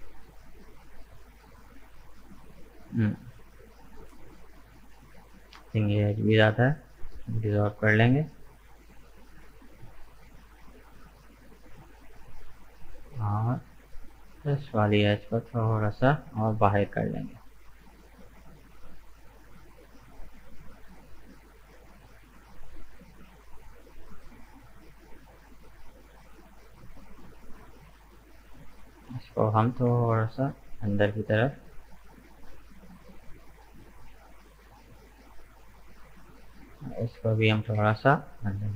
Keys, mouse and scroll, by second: 4.5 right click, 4.9-6.3 middle drag, 6.3 Delete, 7.2-9.4 middle drag, 9.4-9.8 scroll up 2, 9.8-14.0 middle drag, 14.0 right click, 14.3-15.5 middle drag, 15.5 g, 18.7-19.0 scroll down 1, 19.0-20.8 middle drag, 20.8 right click, 21.4-24.4 middle drag, 24.4-25.0 scroll down 2, 25.0-26.7 middle drag, 26.7 right click, 27.4 shift+right click, 27.8-29.3 middle drag, 29.3 g, 33.8-35.1 middle drag, 35.1 right click, 35.7 shift+right click, 36.2-37.7 middle drag, 37.7 g.